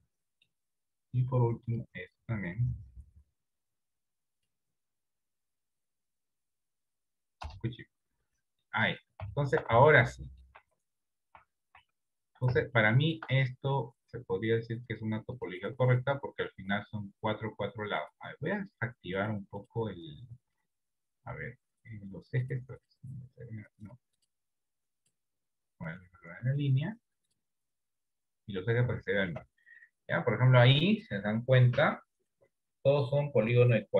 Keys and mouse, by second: 0.1 middle click, 1.7-8.3 drag, 8.8 middle click, 9.7 shift+middle click, 10.1 Tab, 10.3 middle click, 10.9 Tab, 11.5 Tab, 11.8 Tab, 13.0 shift+middle click, 14.8 click, 16.3 middle click, 18.2-19.6 drag, 19.6-28.3 drag, 28.7 middle click, 29.2 shift+middle click, 29.9 middle click, 30.7 middle click, 31.4 middle click, 32.1-33.4 middle drag, 33.7 middle click.